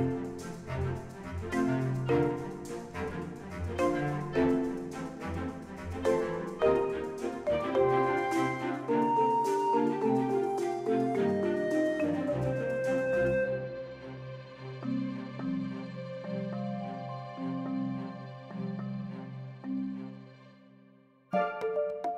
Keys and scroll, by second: 11.8 Tab, 16.1 g, 16.4 y, 18.1 Tab, 18.9 1, 19.7 shift+z.